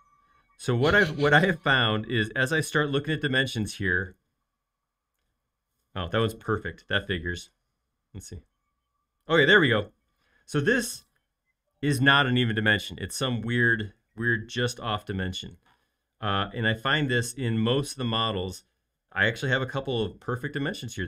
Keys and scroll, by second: 2.9 |, 15.8 l.